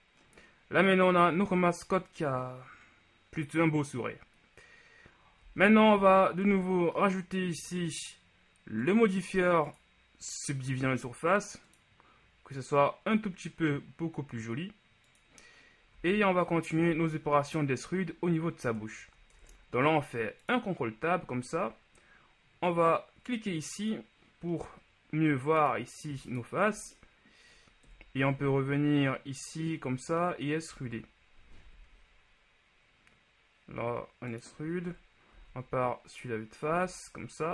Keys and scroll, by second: 5.8 z, 6.6 Tab, 16.2 z, 18.7 Tab, 19.2 ctrl+Tab, 28.0 KP_1, 28.4 z, 30.9 z, 31.8 e, 35.1 KP_1, 35.6 z, 36.8 z.